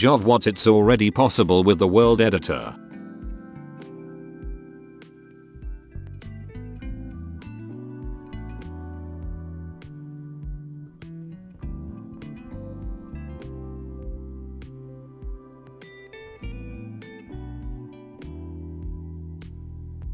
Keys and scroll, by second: 1.9-3.4 typing, 4.0 ctrl+shift+f, 9.7-16.3 typing, 17.5-20.1 typing.